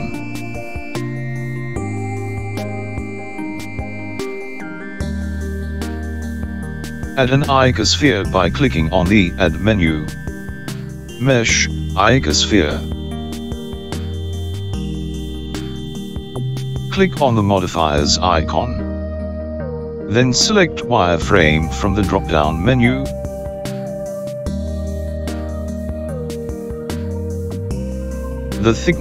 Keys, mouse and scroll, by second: 1.3 shift+click, 5.5 Delete, 9.9 click, 21.2 click, 23.7 click.